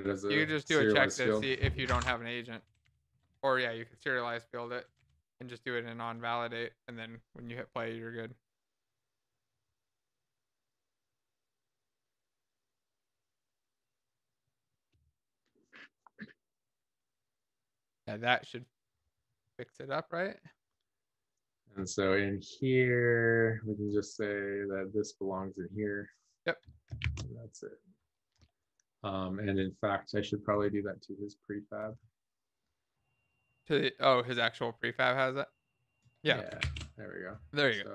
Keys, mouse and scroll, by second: 3.1 shift+f, 4.0 Down, 4.0 Return, 4.7 alt+shift+f, 5.1 ctrl+s, 5.1 Down.